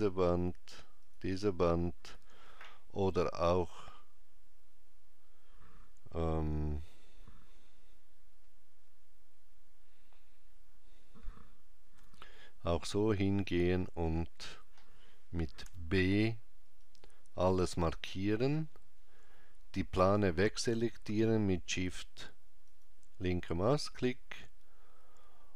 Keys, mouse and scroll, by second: 8.6 KP_5, 11.7 KP_5, 15.4 b, 22.5 shift+click.